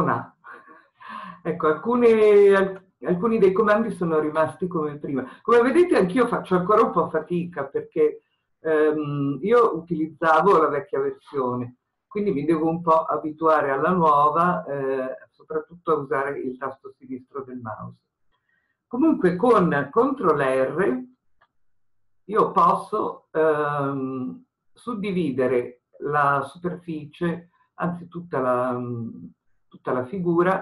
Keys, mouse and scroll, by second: 2.2-6.1 scroll up 1, 21.2 ctrl+r.